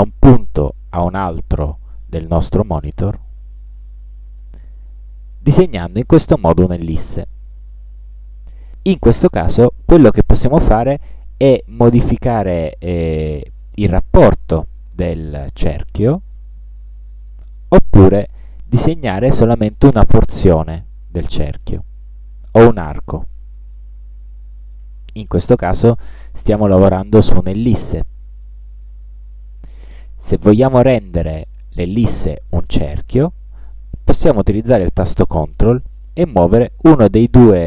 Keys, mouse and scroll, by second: 0.1-3.9 drag, 12.1-13.4 drag, 14.4-16.7 drag, 19.6-21.0 drag, 21.9-24.2 drag, 24.8 click, 29.4 click, 36.4-37.6 ctrl+drag.